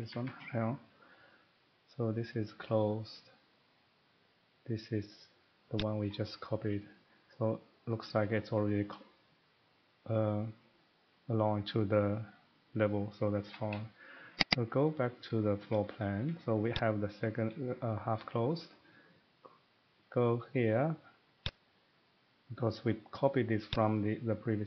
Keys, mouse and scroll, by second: 0.0 Escape, 0.2 Escape, 5.9 click, 13.0 middle click, 13.3 Escape, 13.4 Escape, 13.6 Escape, 14.5 click, 14.8 click, 15.4 middle click, 15.6 Escape, 15.8 scroll up 3, 16.0 scroll down 1, 16.1 middle click, 16.2 Escape, 16.7 click, 21.5 click, 23.9 click.